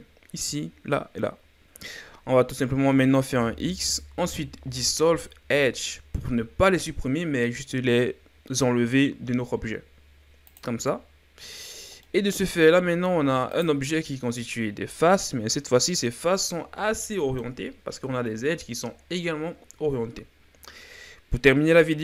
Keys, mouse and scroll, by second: 3.3 x, 11.6-12.0 scroll down 2, 12.0 middle click, 12.8-13.5 scroll up 1, 13.5 right click, 17.0-20.1 middle drag.